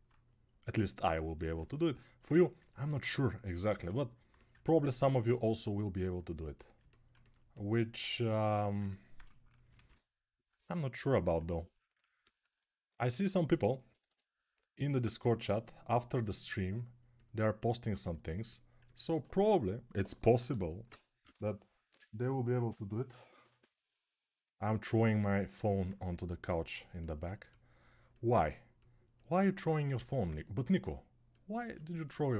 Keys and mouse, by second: 9.5 shift+r, 10.4-13.9 ctrl+right drag, 10.8 ctrl+r, 13.3 g, 13.7 [, 13.8 [, 18.8-32.3 alt+right drag.